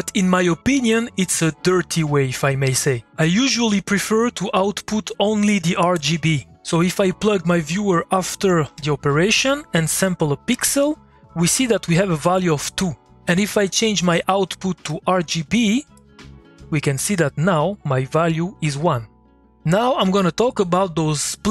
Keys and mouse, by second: 7.9 click, 8.7 2, 10.5 ctrl+click, 14.9-20.9 drag, 21.1-21.5 drag.